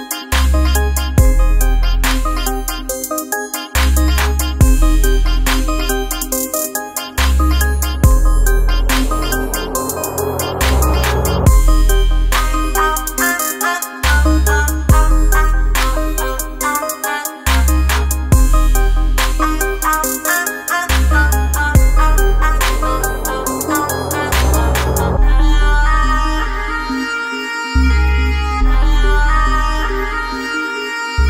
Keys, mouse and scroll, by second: 3.5 click, 3.6 typing, 5.4 space, 5.6 click, 5.9 space, 6.2-9.4 drag, 9.6 click, 9.6 typing, 23.6-28.1 drag.